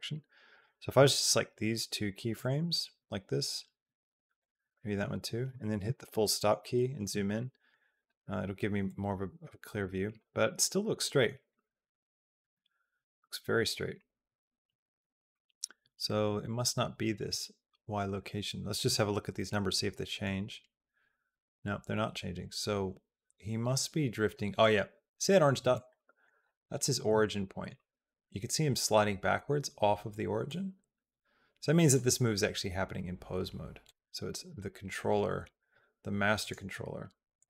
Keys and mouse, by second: 0.3 shift+click, 2.1 shift+click, 4.2 shift+click, 7.2 shift+middle click, 7.8-9.7 drag, 9.9 click, 10.2 click, 11.3 shift+click, 12.3 KP_Decimal, 20.1-24.2 drag, 25.8 shift+middle click, 25.9 shift+click, 27.1 shift+click, 30.3-31.8 drag, 33.6 click, 36.2 click, 37.2 click.